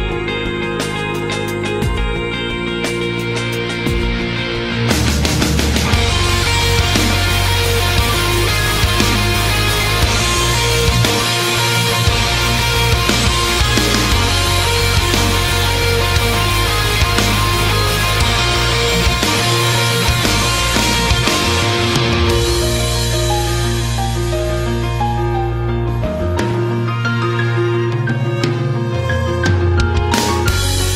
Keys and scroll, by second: 1.3 ctrl+z, 4.8 space, 5.8 space, 6.0 space, 12.3 space, 13.6 space, 14.0 space, 14.8 space, 16.4 space, 18.6-21.6 typing, 23.4 space, 26.4 space, 27.4 space, 28.0 space.